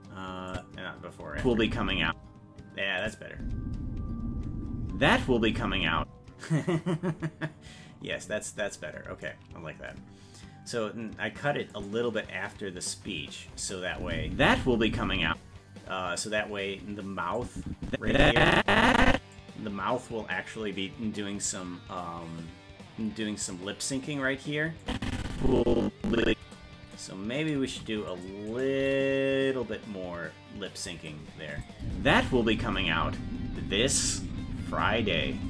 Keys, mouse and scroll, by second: 0.5 click, 1.3 space, 2.1 space, 3.0 click, 3.3 space, 7.1 space, 8.0-9.2 scroll up 10, 9.2-10.0 scroll up 5, 11.8 click, 13.9 space, 15.3 space, 17.4-19.3 drag, 24.8-26.5 drag, 26.9 right click, 27.7 c, 28.8 g, 31.5 click, 31.8 space.